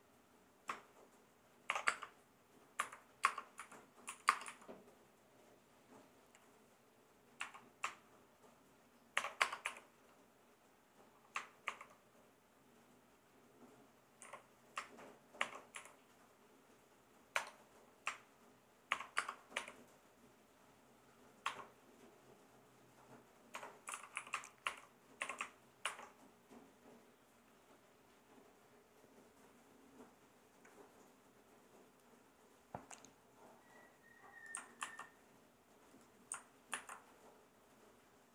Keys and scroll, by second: 1.7 shift+6, 1.9 space, 2.8 n, 3.2 space, 3.6 Left, 4.1 Right, 4.3 space, 4.4 Left, 7.4 x, 9.1 shift+6, 9.4 space, 9.6 i, 11.7 shift+9, 14.2 y, 15.4 shift+6, 15.7 i, 17.3 BackSpace, 18.9 shift+6, 19.2 space, 19.5 l, 21.4 -, 23.3-25.8 typing, 34.8 super+c, 36.7 super+v.